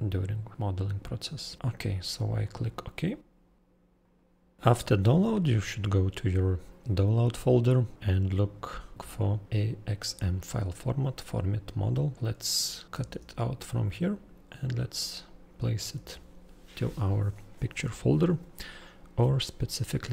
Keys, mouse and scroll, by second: 1.7 click, 4.0 click, 4.6-8.9 scroll, 8.9-10.2 click, 12.5-13.0 ctrl+Delete, 13.0 ctrl+x, 14.4 click, 15.1 click, 15.5 ctrl+Delete, 15.9 ctrl+v.